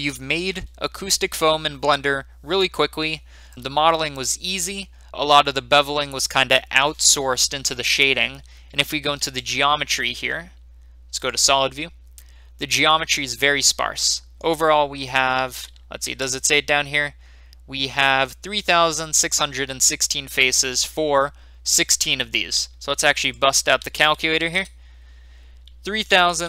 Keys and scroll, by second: 9.2 Tab, 16.0 Tab, 24.4 typing, 24.5 Return, 25.8-26.4 typing.